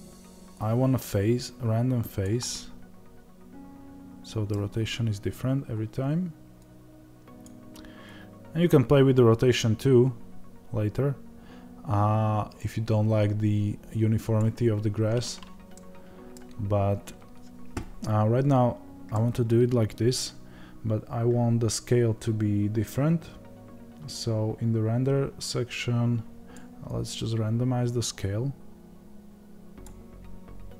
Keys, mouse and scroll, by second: 2.4-6.6 middle drag, 4.5 scroll down 2, 4.6-5.4 scroll up 2, 5.4 scroll up 1, 5.5-6.6 scroll down 2, 6.6-15.6 drag, 15.6-25.5 middle drag, 16.5-19.1 scroll up 2, 25.5-30.7 drag.